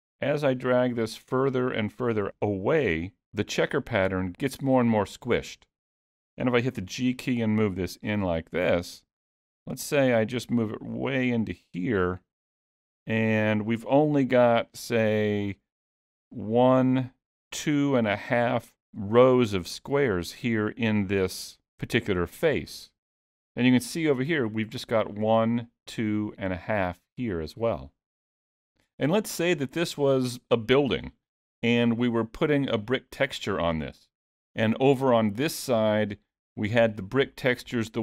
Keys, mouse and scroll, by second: 1.3-2.1 scroll down 2, 2.9 g, 6.8 g, 11.7-12.1 scroll up 3, 12.2 shift+middle click, 12.7 scroll up 1, 13.1 shift+middle click, 14.5 g, 30.9-31.5 scroll down 2, 31.5 middle click, 33.4-34.0 scroll up 2.